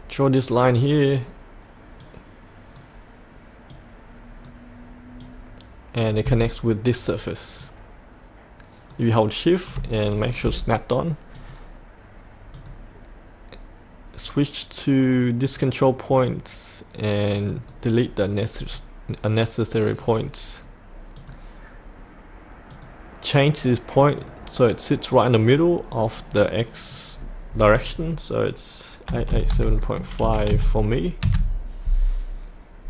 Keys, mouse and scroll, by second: 7.6 shift+click, 11.3-13.6 drag, 17.7 right click, 18.6 click, 20.2 right click, 21.1-27.8 drag, 29.1 KP_8, 30.2 KP_Decimal, 30.5 KP_5.